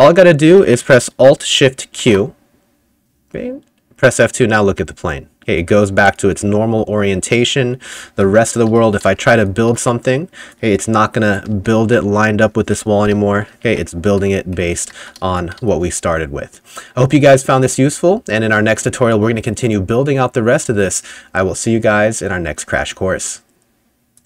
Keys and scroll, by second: 2.1 alt+shift+q, 4.1 F2, 8.0 F5, 8.5-10.2 typing, 11.3-12.3 typing, 14.1 Escape, 14.6-16.0 typing, 18.5-19.9 typing.